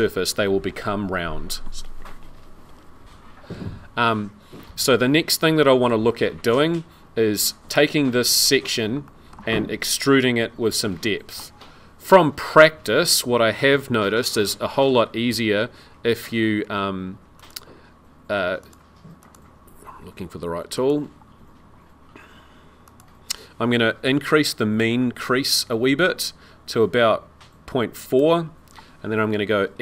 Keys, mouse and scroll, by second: 4.0 middle click, 5.2 scroll down 1, 5.6 middle click, 8.6 scroll up 2, 9.0 shift+middle click, 14.4 click, 18.6 click, 19.2 click, 20.8 click, 22.9 click, 24.8 click.